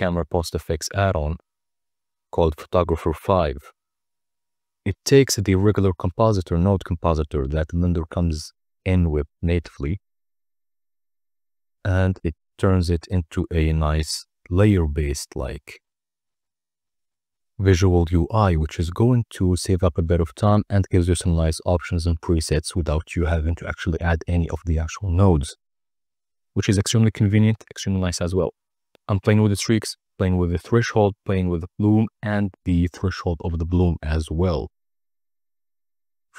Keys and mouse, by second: 11.9-14.2 drag, 15.4-17.3 drag, 15.8 BackSpace, 17.8-19.5 drag, 22.9-24.6 drag, 25.9-27.5 drag, 28.1-29.6 drag, 28.2 BackSpace, 30.7-32.5 drag, 32.8-34.4 drag, 34.6 click, 34.8-36.3 drag.